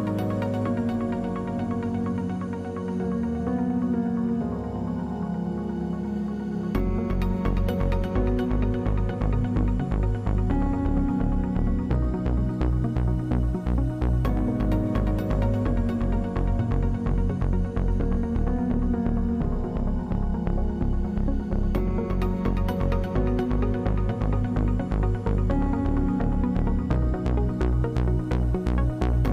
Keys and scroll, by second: 3.6 space, 21.2-22.4 typing, 25.5 0, 26.0 Return.